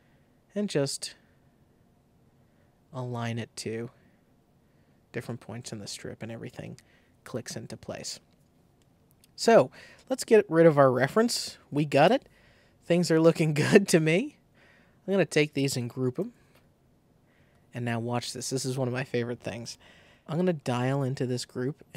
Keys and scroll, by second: 12.0 BackSpace, 16.1 super+g.